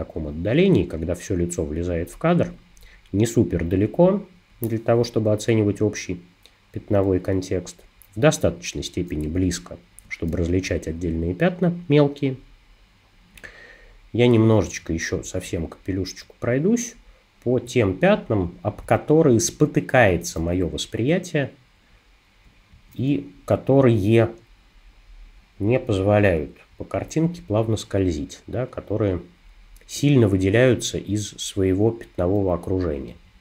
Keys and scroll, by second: 9.3 space.